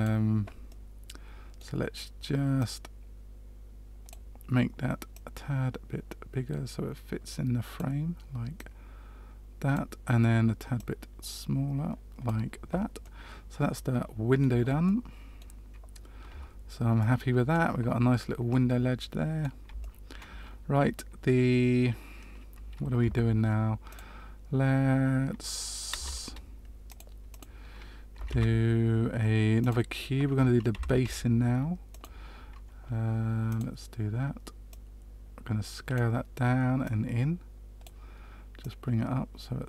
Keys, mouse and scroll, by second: 0.6 middle click, 2.5 click, 5.1 click, 8.5 click, 10.7 click, 13.0 middle click, 14.8 middle click, 16.2 Tab, 16.9 middle click, 18.4 middle click, 19.7 shift+middle click, 22.9 Tab, 23.8 click, 25.9 space, 27.2 click, 28.2 shift+a, 30.7 s, 33.4 click, 34.6 click, 36.8 click, 38.5 click.